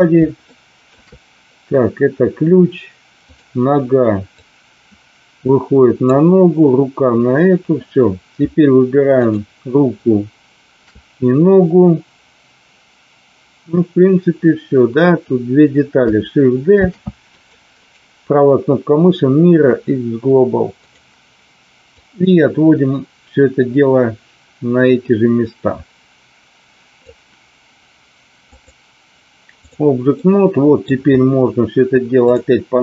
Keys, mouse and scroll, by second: 0.6 shift+middle click, 3.2 click, 4.4-6.1 drag, 9.1 shift+click, 16.7 shift+d, 17.2 click, 17.8-20.9 right drag, 21.8-27.0 drag, 28.4-29.7 drag, 30.2-30.9 middle drag, 32.2 click.